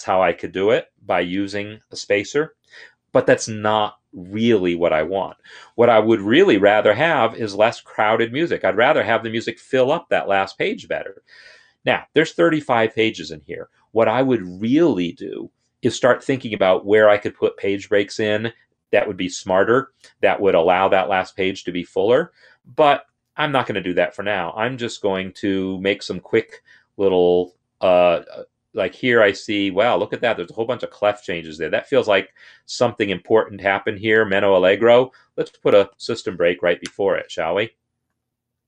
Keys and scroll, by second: 6.0 Delete, 36.6 Return.